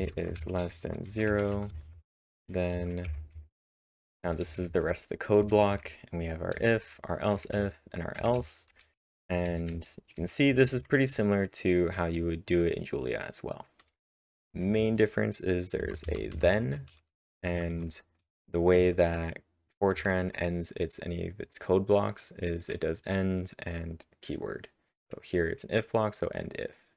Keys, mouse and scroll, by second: 0.0-2.7 typing, 3.1 Tab, 4.2-10.7 typing, 12.8-15.0 typing, 16.8-20.2 typing.